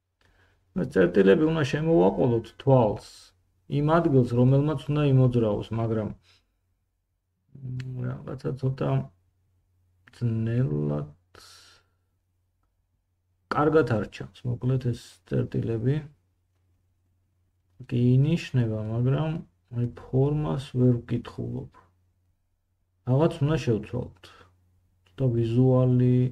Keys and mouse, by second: 1.3 middle click, 1.3-22.9 drag, 9.0 g, 13.0 g, 22.9 middle click, 23.1-25.7 drag, 25.7 middle click, 25.9-26.3 drag.